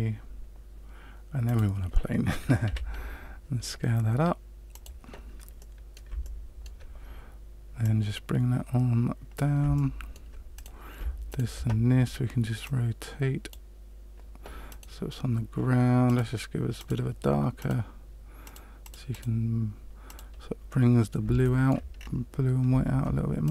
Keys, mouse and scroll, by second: 2.6 s, 5.5 middle click, 6.2 shift+middle click, 7.8 click, 9.7 shift+middle click, 10.5 right click, 11.2 shift+right click, 12.6 click, 14.6 right click, 16.0 click, 16.7 click, 17.5 click, 20.6 middle click, 21.4 shift+middle click, 21.9-22.6 scroll down 2, 22.6-23.0 scroll down 1, 23.4 right click.